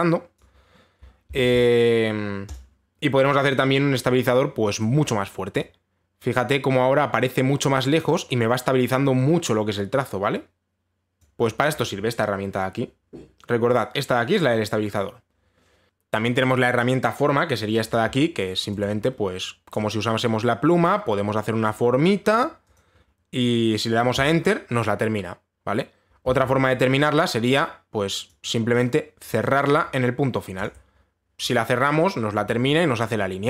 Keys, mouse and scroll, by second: 0.9 click, 2.0 ctrl+z, 3.2 click, 5.4 click, 11.8 click, 15.9 click, 16.3 click, 18.6 click, 19.4 click, 21.4 click, 22.7 click, 23.4 click, 24.8 Return, 27.0 ctrl+z, 27.6 click, 28.9 click, 29.4 click, 30.2 click, 31.2 click.